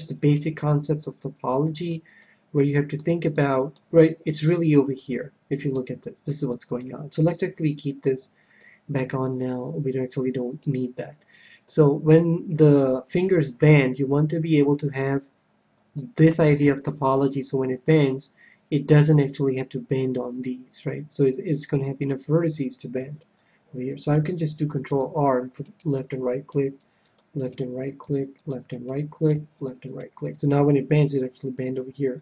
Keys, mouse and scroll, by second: 0.3-1.9 drag, 1.0-4.9 middle drag, 4.9-6.3 drag, 5.7-8.0 middle drag, 8.5-10.4 middle drag, 11.1-12.9 middle drag, 15.9-18.5 middle drag, 24.1 ctrl+r, 25.9-31.6 right drag, 26.5 ctrl+r, 28.0 ctrl+r, 29.3 ctrl+r.